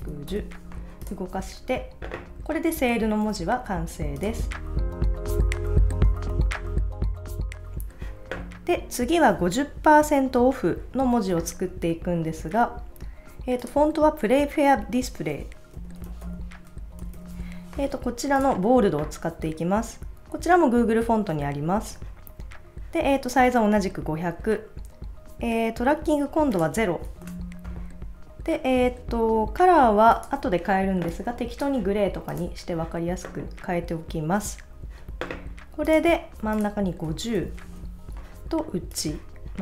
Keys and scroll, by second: 15.5-17.9 typing, 27.2 0, 28.2 Return, 37.1-38.1 typing.